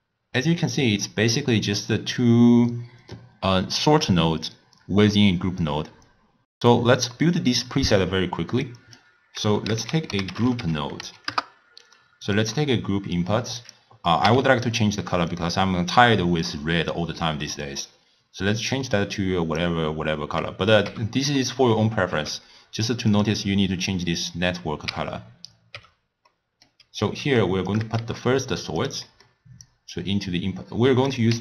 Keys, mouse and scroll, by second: 7.1-8.6 middle drag, 8.6 click, 9.6 ctrl+a, 12.6-13.6 middle drag, 13.6 click, 14.2 n, 15.3 click, 20.9 n, 21.4-22.1 middle drag, 22.1 n, 23.1 click, 25.7 n, 26.3-27.7 middle drag, 27.7 click, 28.3 shift+d, 29.1 middle click, 29.7 click, 31.0-31.4 drag.